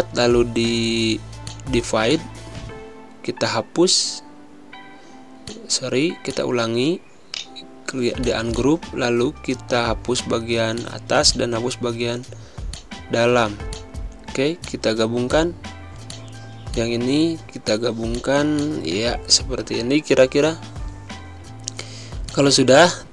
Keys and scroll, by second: 2.6 ctrl+z, 3.4 ctrl+shift+], 9.2 Delete, 11.4 Delete, 17.8 space, 20.4 ctrl+a.